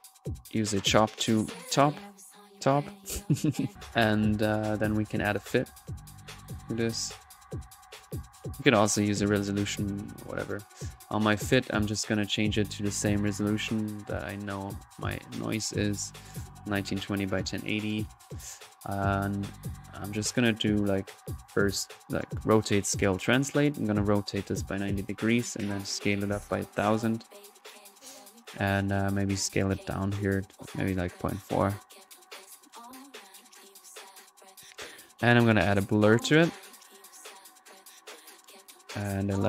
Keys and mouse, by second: 0.0-0.4 typing, 0.0 drag, 0.7 click, 1.4-3.7 drag, 6.7 right click, 7.8-8.6 typing, 8.1 click, 8.6 click, 8.9-14.4 drag, 14.5 middle click, 14.8 click, 15.8-17.2 middle drag, 17.2 click, 20.5 drag, 20.8-22.4 drag, 22.8-24.8 drag, 25.8 click, 27.3-27.7 middle drag, 29.4-29.8 drag, 30.6-32.6 drag, 32.6-34.3 middle drag, 34.3-35.5 drag, 35.5-36.7 right drag, 35.9 alt+b, 36.7-39.4 drag, 36.7 b.